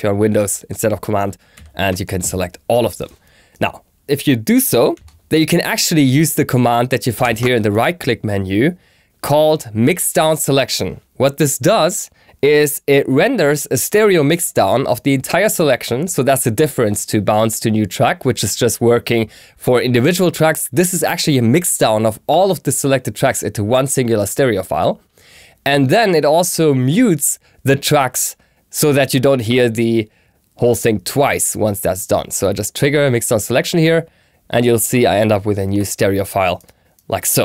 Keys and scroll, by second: 1.4 shift+super+a, 4.1 BackSpace, 7.0 shift+super+a.